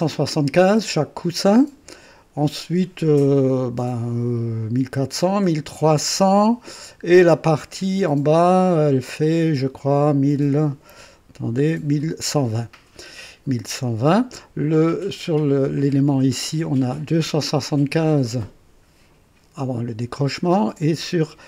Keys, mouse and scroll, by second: 11.0-11.8 ctrl+scroll down 4.